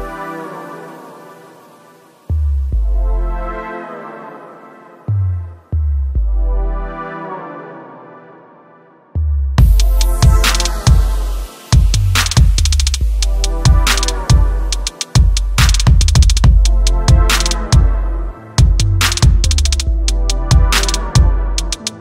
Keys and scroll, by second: 3.3 ctrl+d.